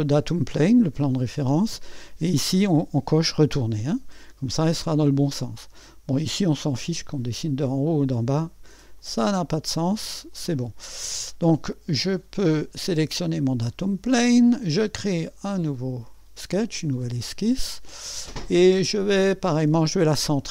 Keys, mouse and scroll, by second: 0.0 click, 1.0 click, 4.7 click, 9.0 click, 10.3 click, 12.5 click, 14.7 click, 15.0 click, 15.2 click, 16.0-16.9 scroll up 1, 16.9-18.2 right drag.